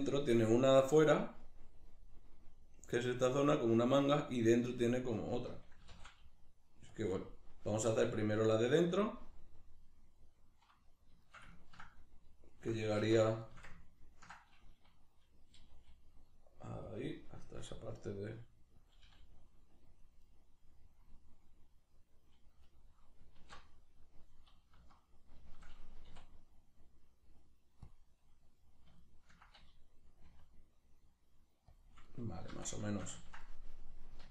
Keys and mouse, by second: 1.4-7.1 middle drag, 5.8 s, 7.1 click, 7.7 g, 9.0 click, 9.2-17.0 middle drag, 13.0 alt+q, 15.7 g, 17.0 click, 17.5 s, 18.9 click, 19.1 g, 20.0 click, 20.2-31.8 middle drag, 23.3 alt+q, 24.8 z, 26.1 w, 30.3 r, 31.8 click, 32.1-34.3 middle drag, 32.5 z.